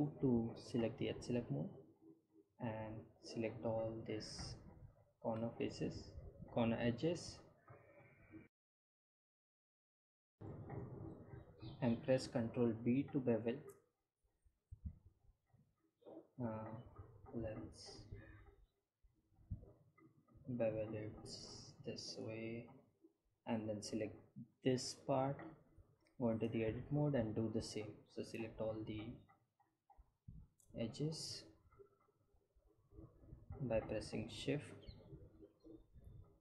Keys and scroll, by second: 11.9 ctrl+b, 20.2 Tab, 24.4 Tab.